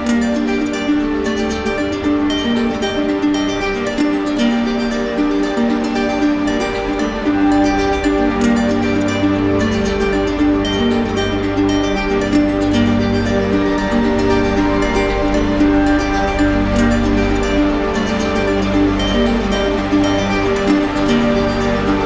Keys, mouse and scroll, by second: 1.6 ctrl+click, 1.8 ctrl+z, 4.9 click, 7.5 click, 8.1 click, 8.3 click, 9.6 ctrl+click, 10.6 ctrl+click, 11.5 ctrl+click, 12.4 middle click, 13.3 right click, 14.4 click, 15.9 click, 16.5 click, 17.4 click, 17.8 ctrl+z, 19.1 alt+click, 19.7 alt+click, 20.6 alt+click, 21.2 alt+click.